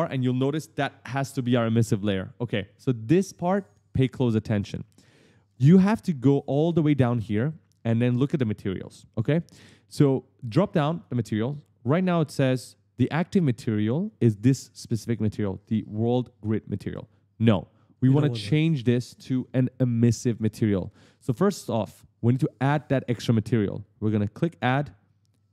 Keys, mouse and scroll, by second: 3.1 right click, 3.2 right click, 3.8 right click, 4.4 right click, 10.7 click, 24.5 click.